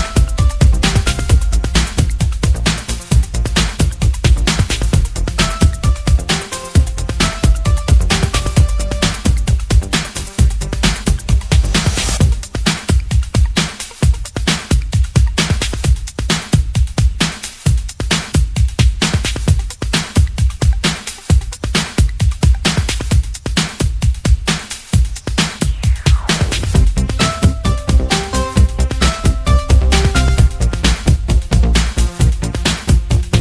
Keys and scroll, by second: 6.6 ctrl+alt+t, 14.4-20.8 typing, 29.3 Return, 30.0-31.4 typing, 31.4 Return, 32.5-33.3 typing.